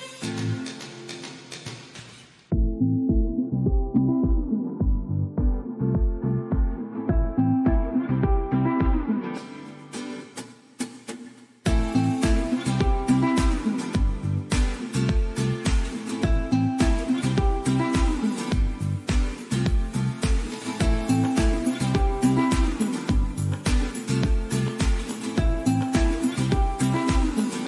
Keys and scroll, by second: 0.1 super+d, 22.8 super+d.